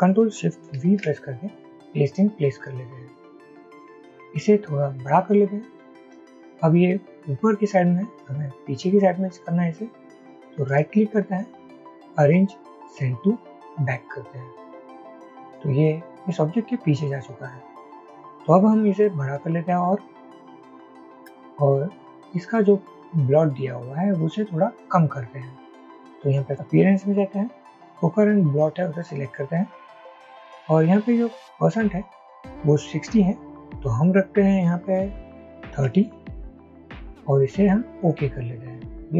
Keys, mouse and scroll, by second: 0.8 ctrl+shift+v, 5.4 alt+shift+click, 10.8 right click, 20.2 alt+shift+click, 35.8 typing.